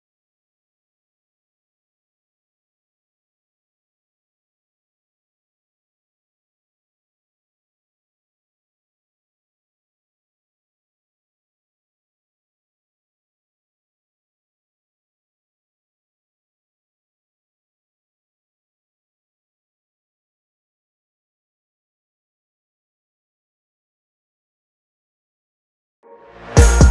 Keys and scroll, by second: 10.8 Delete.